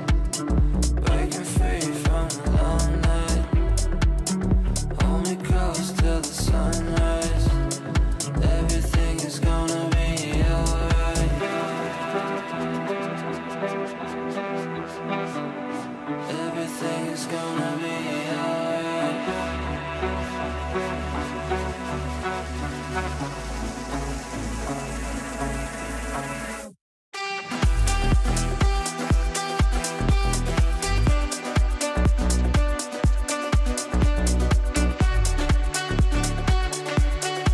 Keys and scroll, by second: 9.4 KP_Add, 19.8 Delete, 22.2 ctrl+z, 23.1 Delete.